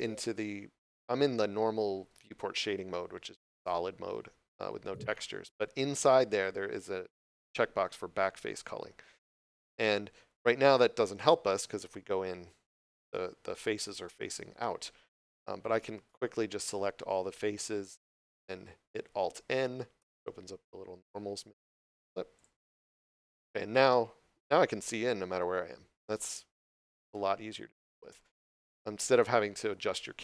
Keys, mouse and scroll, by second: 4.8 click, 9.2 click, 10.2 middle click, 10.9 scroll up 1, 14.8 scroll down 1, 20.0 alt+n, 22.2 click, 23.3 Tab, 23.8 middle click, 27.7 scroll up 1, 27.7 middle click.